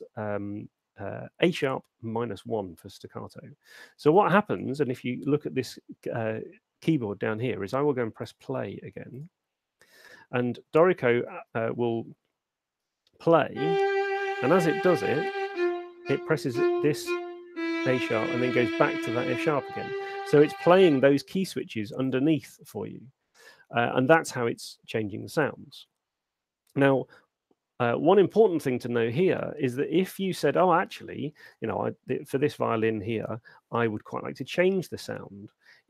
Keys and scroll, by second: 11.8 alt+space, 12.6 alt+shift+space, 20.9 space.